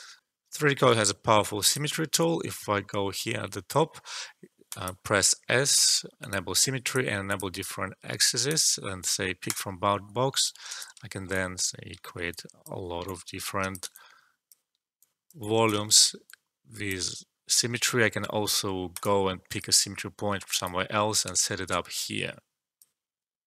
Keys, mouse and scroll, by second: 0.2 alt+F12, 1.6 click, 4.6 click, 10.4 alt+click, 11.0 alt+shift+middle click, 11.3 click, 12.2-14.9 drag, 15.8 alt+shift+middle click, 16.2-17.7 drag, 17.7 alt+middle click, 18.9 click, 20.1 alt+middle click, 20.6 click, 21.2 space.